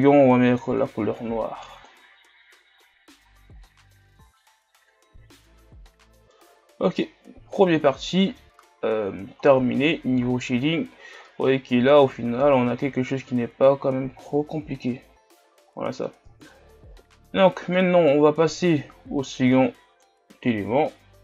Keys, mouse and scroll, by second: 0.9 click, 2.9 scroll down 2, 3.3 a, 3.7-7.3 middle drag, 7.3-8.0 scroll up 3, 8.0-9.0 middle drag, 9.0-12.1 scroll down 3, 12.1-17.3 drag, 17.3-19.8 middle drag, 19.8-21.2 drag.